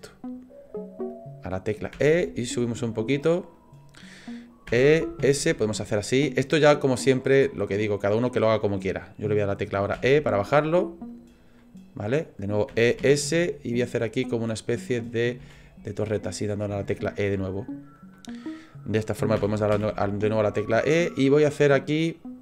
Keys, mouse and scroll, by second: 7.4 middle click, 8.3-9.9 scroll up 1, 9.9 e, 11.6 middle click, 12.7 e, 14.9 middle click, 15.4 e, 16.8 shift+middle click, 17.4 middle click, 19.4 e.